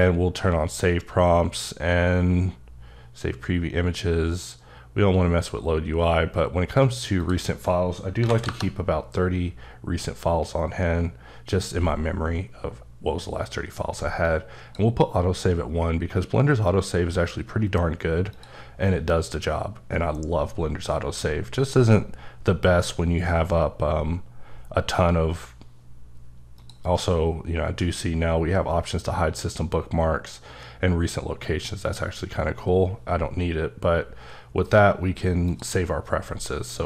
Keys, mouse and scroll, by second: 7.2 click, 8.2 KP_3, 8.4 KP_Enter, 14.2 KP_Enter, 14.3 click, 18.3 click, 26.6 click, 31.8 click, 35.5 click, 36.7 click.